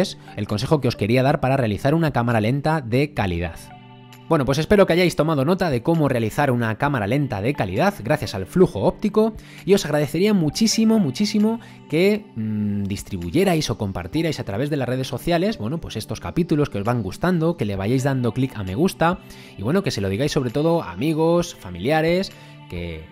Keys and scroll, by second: 2.1 Escape, 3.8 space.